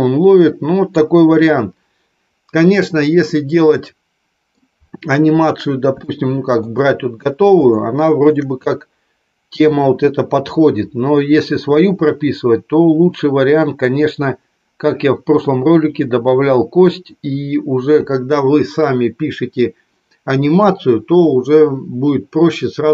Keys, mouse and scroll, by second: 3.1-4.4 middle drag, 6.0 shift+middle click, 7.6 shift+middle click.